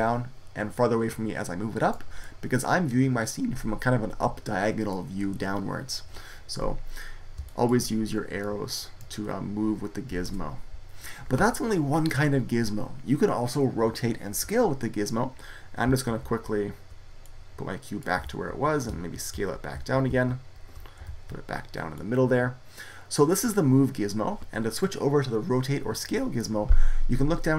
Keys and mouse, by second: 2.3-4.1 middle drag, 7.3 middle click, 8.3-10.0 drag, 10.0 ctrl+z, 10.2-13.2 middle drag, 13.4-17.1 middle drag, 16.1 ctrl+z, 18.1 ctrl+z, 18.8 ctrl+z, 19.2 ctrl+z, 19.2-21.8 middle drag, 19.6 ctrl+z, 19.9 ctrl+z, 20.5 ctrl+z, 20.9 ctrl+z, 24.2 middle click.